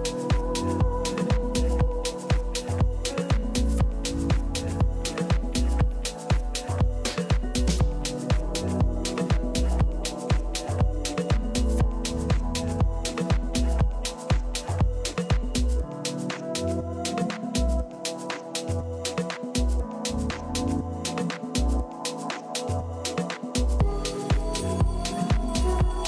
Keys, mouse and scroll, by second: 2.4 f, 3.3-5.1 middle drag, 6.0 z, 7.1 middle click, 8.6 middle click, 8.8 middle click, 10.4 KP_3, 11.6-14.0 middle drag, 15.8 a, 20.0-21.9 drag, 20.6-22.5 right drag, 21.6 Delete, 22.9-24.4 middle drag, 25.5 a.